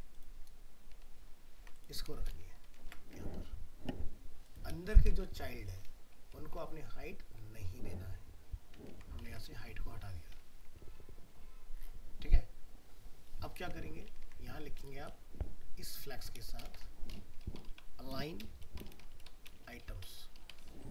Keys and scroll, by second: 1.1 ctrl+z, 1.6 ctrl+c, 2.3 ctrl+v, 2.8 ctrl+s, 8.9 ctrl+s, 9.3 alt+Tab.